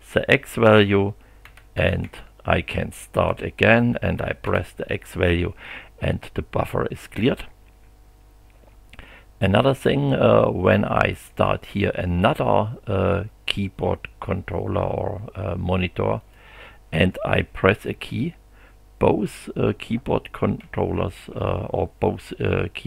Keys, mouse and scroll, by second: 1.2-3.3 typing, 4.4 x, 11.3 click, 16.2 click, 17.9 q, 20.6 g, 21.3 h.